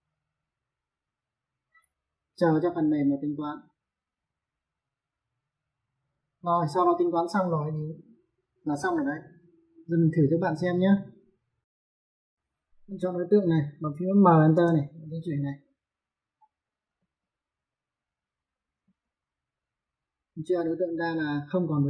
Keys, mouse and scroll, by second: 11.8 ctrl+1, 13.2 click, 14.1 m, 14.3 space, 14.9 click, 16.5 click, 16.7 space, 17.0 click, 18.6 space, 18.8 click.